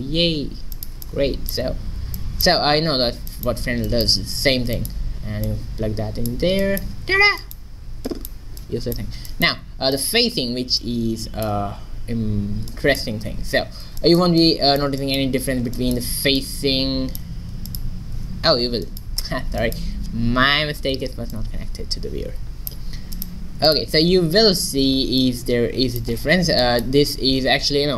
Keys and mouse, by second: 5.5-6.9 drag, 8.1-9.7 drag, 10.8-12.8 drag, 17.7-19.5 drag, 23.2-25.5 drag, 25.5 middle click.